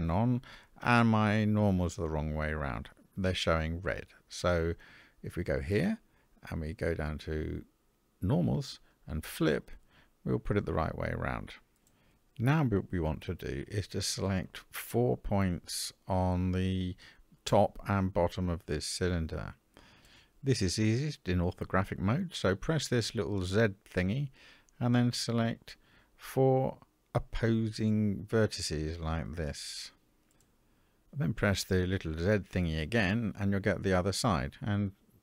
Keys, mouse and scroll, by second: 2.8 a, 4.7-9.4 drag, 15.8 click, 22.3 click, 24.3 click, 26.8 shift+click, 27.9 shift+click, 29.6 shift+click, 32.2 click.